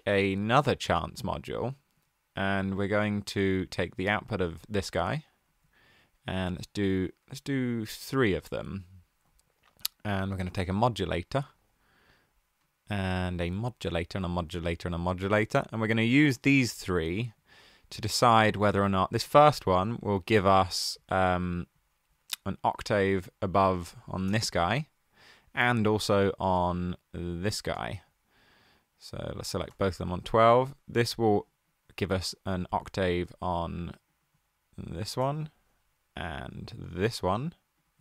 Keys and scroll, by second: 6.5 super+d, 8.0 super+d, 10.1 super+a, 10.2-11.7 typing, 13.5 super+d, 16.5 super+z, 23.9-24.7 typing, 29.6 typing, 34.8-35.6 typing.